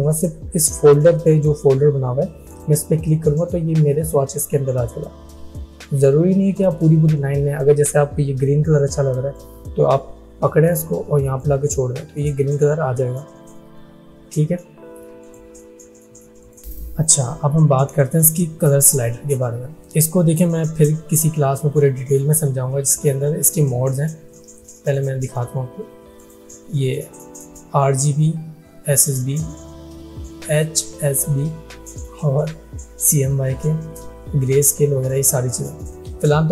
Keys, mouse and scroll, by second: 2.5 click, 9.4-11.5 drag, 15.3-19.1 drag, 24.9 click.